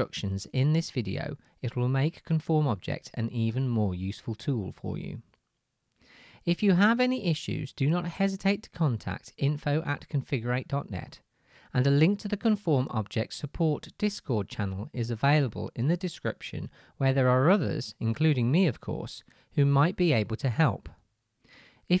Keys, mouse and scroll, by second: 1.3-5.5 middle drag, 1.5 s, 5.0 Tab, 5.5-15.7 drag, 7.9 KP_Decimal, 10.9 Tab, 13.5 g, 15.7-17.9 shift+middle drag, 17.9-20.3 drag, 17.9 g, 20.3-21.9 shift+middle drag, 21.3 Tab.